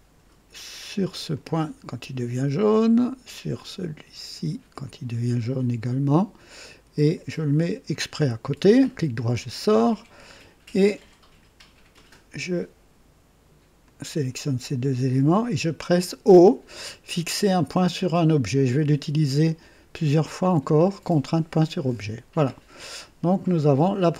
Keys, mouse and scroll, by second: 1.3 click, 4.8 click, 7.9 click, 8.6 right click, 11.9 click, 13.8 click, 21.8 o, 23.4 click.